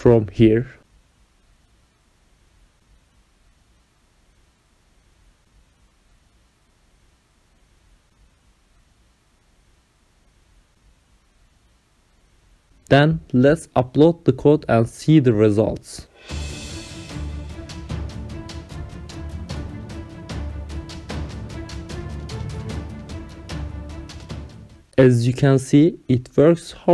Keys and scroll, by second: 0.0-11.4 typing, 5.9 ctrl+alt+7, 6.4 Return, 9.8 Left.